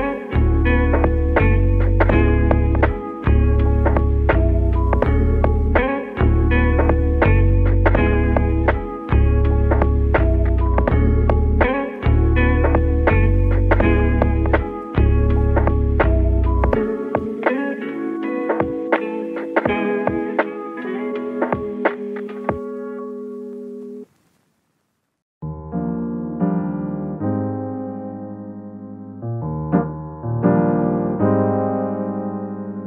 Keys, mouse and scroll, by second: 2.4 click, 4.0 z, 4.5-4.9 scroll down 5, 4.9 middle click, 5.3 Tab, 5.8-7.0 middle drag, 7.0 scroll up 3, 7.1 click, 7.4 Tab, 8.6 click, 8.8-9.5 scroll up 2, 9.5 alt+shift+click, 10.7 alt+shift+click, 11.7 KP_3, 13.4 scroll up 2, 14.2 e, 15.2 click, 17.8-18.5 scroll up 1, 18.5 click, 19.2 shift+click, 20.2 click, 24.4 click, 25.7 alt+shift+click, 26.4 scroll down 2, 26.6-27.4 middle drag, 27.4 e, 28.4 ctrl+z, 29.0 ctrl+z, 29.2-30.2 middle drag, 30.2 alt+shift+click, 30.8 alt+shift+click, 32.1 click.